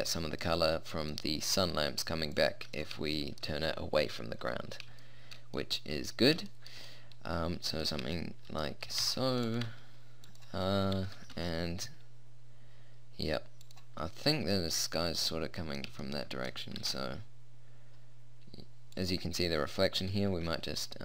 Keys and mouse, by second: 2.3-4.6 drag, 7.2-8.6 middle drag, 8.9 g, 9.7 g, 11.0 r, 16.9 r.